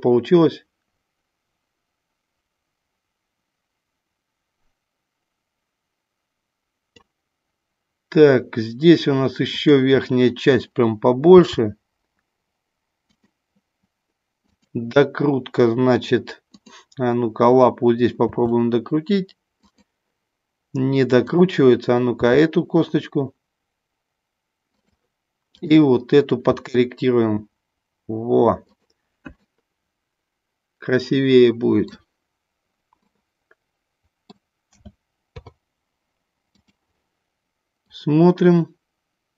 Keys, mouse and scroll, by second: 9.5 click, 11.4 g, 13.1 click, 14.4 click, 16.5 click, 18.3 r, 19.6 click, 21.2 click, 22.1 r, 25.5 click, 26.4 r, 28.6 click, 29.4-31.9 middle drag, 33.0-34.4 middle drag, 34.6 a, 35.2 i, 37.8-39.3 drag.